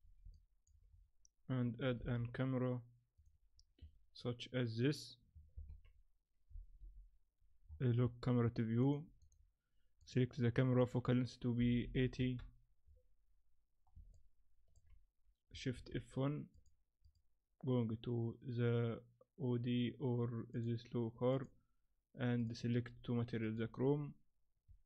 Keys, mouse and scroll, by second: 0.3 middle click, 0.9-1.3 scroll up 4, 2.0 shift+a, 5.5 ctrl+alt+KP_0, 6.8 n, 7.4 scroll down 1, 7.7-8.6 scroll up 10, 8.6 scroll up 1, 8.8 click, 9.2 click, 12.8-13.8 scroll down 1, 13.8 scroll down 2, 14.1 ctrl+middle click.